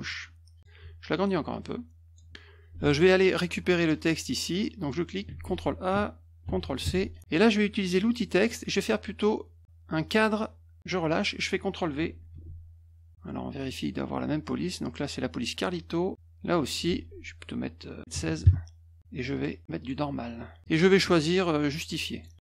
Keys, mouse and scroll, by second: 1.5 click, 2.8 alt+Tab, 4.8 click, 5.3 ctrl+a, 6.4 ctrl+c, 6.8 alt+Tab, 8.1 click, 8.4 middle click, 10.0 click, 12.3 ctrl+v, 13.6 click, 16.9 ctrl+a, 18.1 typing, 18.4 Return, 19.3 click, 19.8 click, 20.6 click, 22.1 click.